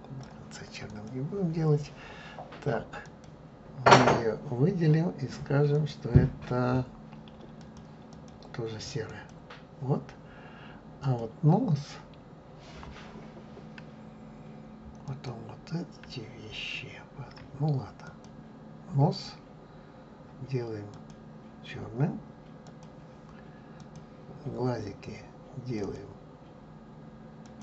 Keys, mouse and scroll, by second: 1.0 click, 3.1 click, 7.7 click, 9.4-11.1 drag, 18.1 click, 22.9-24.0 drag.